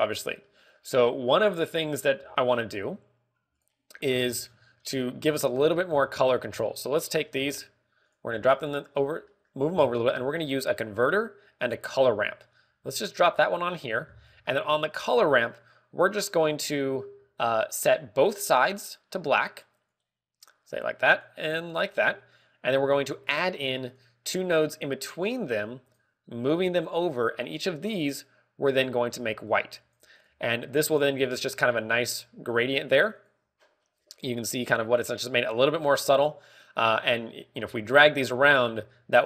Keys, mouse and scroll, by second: 4.4 click, 5.1 scroll down 1, 6.1 scroll down 9, 6.5-8.3 typing, 9.0 click, 9.2-10.0 scroll up 6, 9.6 middle click, 10.2 middle click, 11.0 shift+a, 13.0 g, 14.0 g, 14.0 click, 14.1-15.2 scroll up 6, 14.6 middle click, 15.4 middle click, 15.7 scroll up 1, 18.3 g, 18.7 click, 19.6 click, 22.1 click, 23.7 click, 25.7 click, 27.7 click, 28.8 click, 30.6 click, 31.7 click, 32.3 click, 38.5 click.